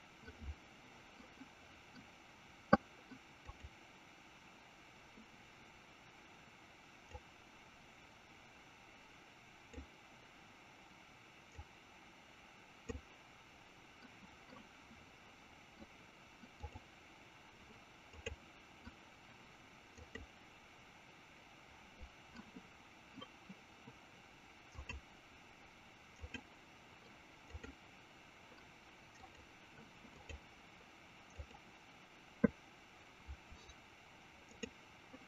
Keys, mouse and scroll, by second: 3.5 click, 7.1-10.5 drag, 11.5-13.8 drag, 16.6 click, 18.1-22.0 drag, 27.5 click, 29.2 click, 30.1-33.1 drag, 34.5-35.2 drag.